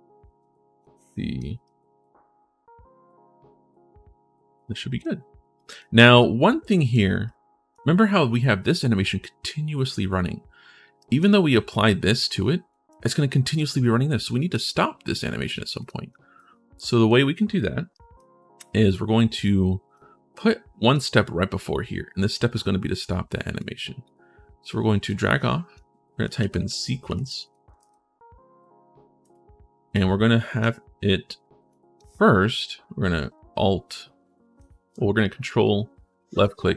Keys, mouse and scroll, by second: 0.6 right click, 1.4-4.8 right drag, 5.3 right click, 6.0 right click, 7.0 right click, 10.8 right click, 11.5 click, 12.5 right click, 13.2 click, 14.4 click, 15.6 click, 15.9 right click, 16.6 right click, 17.7 right click, 19.7-20.7 drag, 23.3 click, 24.8 click, 25.8-28.1 typing, 29.0 click, 29.7 click, 31.5 click, 35.4 ctrl+click.